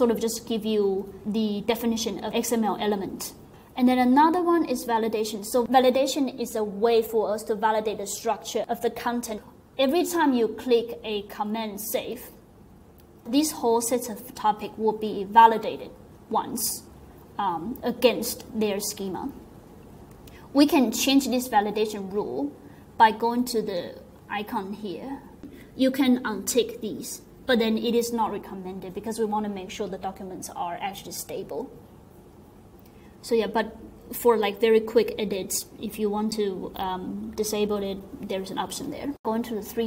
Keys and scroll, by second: 11.8 super+s.